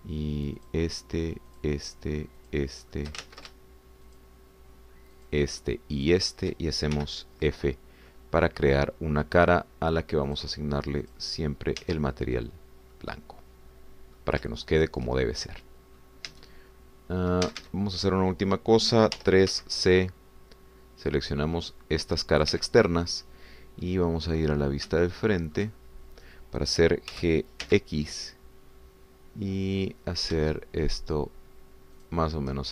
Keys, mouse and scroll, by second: 1.7 shift+click, 2.5 shift+click, 3.6 shift+click, 4.2 ctrl+shift+z, 5.2 shift+click, 6.3 shift+click, 7.0 shift+click, 8.0 f, 9.1 middle click, 11.3 click, 12.0 click, 12.9 Tab, 13.4-13.7 scroll down 1, 13.9-15.4 drag, 15.5 shift+click, 16.3 shift+click, 17.4 Tab, 17.7-18.2 scroll up 2, 18.5 a, 20.2 3, 20.5 c, 21.0-23.7 drag, 23.5 Escape, 23.9 scroll down 1, 24.8-26.0 middle drag, 26.1-28.1 shift+middle drag, 28.1 g, 28.7 x.